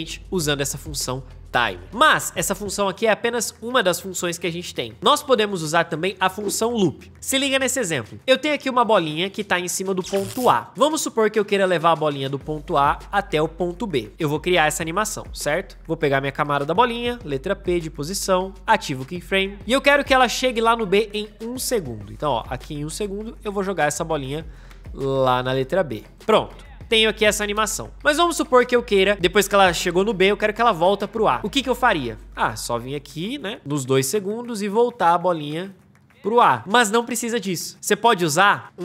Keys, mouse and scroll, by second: 16.9 p, 27.3 space, 37.9 ctrl+z, 38.6 ctrl+z.